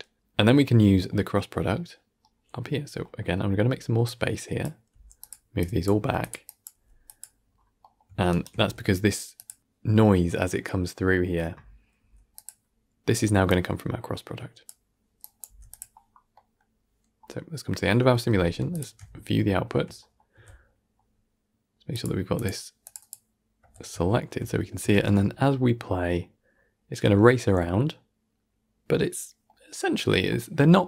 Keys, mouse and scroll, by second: 0.8 scroll down 4, 1.0-2.2 middle drag, 2.2-2.9 scroll down 5, 2.4 middle click, 2.9-3.9 middle drag, 3.9 click, 4.8 g, 5.5 click, 5.8 g, 6.3 click, 6.6 g, 7.3-7.7 scroll up 6, 7.7-8.2 middle drag, 8.4 g, 11.9 g, 13.4 click, 15.1 click, 15.3 g, 16.2-17.0 middle drag, 17.0 scroll down 6, 17.2-18.6 middle drag, 18.6 alt+shift+click, 19.4-20.2 shift+middle drag, 20.2 z, 20.6 middle drag, 20.9 scroll up 1, 21.8 click, 22.2 click, 22.7 click, 23.5 z, 23.9-24.8 shift+middle drag, 24.8 shift+space, 26.2-27.3 scroll down 2, 27.3-30.0 middle drag, 30.0 scroll down 2, 30.2-30.8 middle drag.